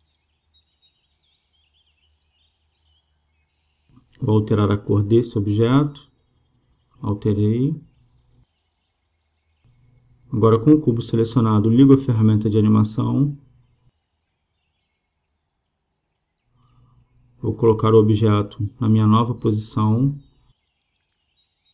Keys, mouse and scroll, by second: 1.0 shift+d, 6.0-7.8 drag, 10.7-12.5 right drag, 16.5-18.3 drag.